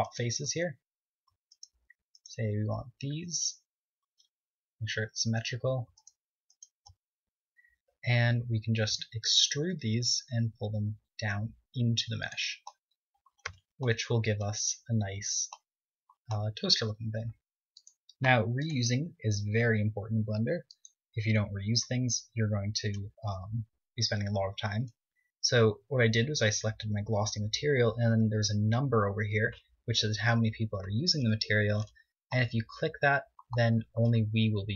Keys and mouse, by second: 0.1 click, 0.5 z, 1.2-3.8 drag, 7.1-9.0 right drag, 9.0 middle click, 9.4 KP_1, 10.1 z, 10.8 e, 13.3 click, 14.6 Tab, 16.1 z, 25.7-31.6 middle drag, 32.2 middle click, 33.9-34.7 middle drag.